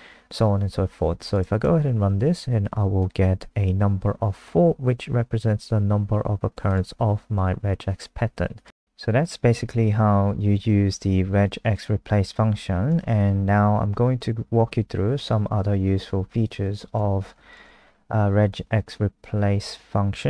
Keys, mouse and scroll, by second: 1.6 F5, 3.0 click, 12.0-13.4 scroll up 1, 13.4 Down, 13.6 Down, 14.1 Up, 17.5 shift+click, 18.3 shift+Up, 19.7 shift+End.